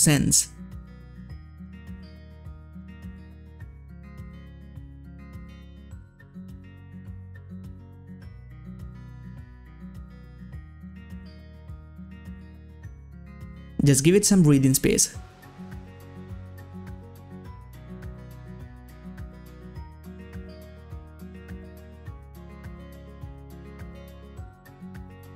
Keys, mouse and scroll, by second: 5.7-6.1 scroll down 1, 6.3 scroll up 1, 7.1 scroll down 1, 7.5 click, 7.7 scroll up 1, 8.5-10.7 drag, 11.4-15.5 drag, 16.8 scroll up 1, 16.9-17.3 ctrl+scroll down 1, 17.4-18.4 scroll up 1, 18.4 click, 24.2 ctrl+scroll up 1, 25.1 space, 25.2 click.